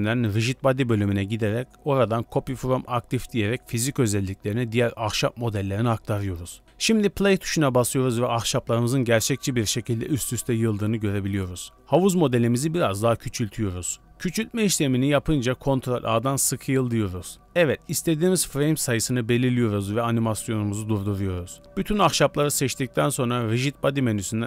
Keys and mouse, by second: 10.2-10.7 drag.